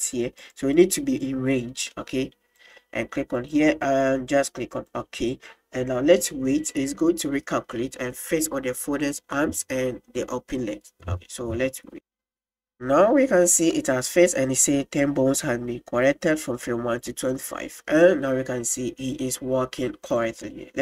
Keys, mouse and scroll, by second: 0.9 click, 3.4-12.2 drag, 17.2 click.